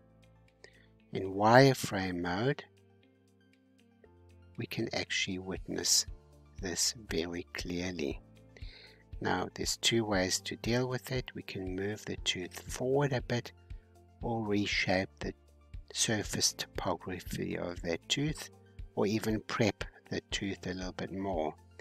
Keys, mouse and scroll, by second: 2.5-4.3 drag, 4.3 middle click, 5.2-5.7 scroll up 4, 5.7-8.9 middle drag, 8.9 scroll down 2, 9.7-11.0 drag, 11.6 scroll down 2, 12.0 middle click, 12.9 scroll up 1, 14.8 g, 19.7-20.1 scroll up 4, 20.4-21.8 middle drag.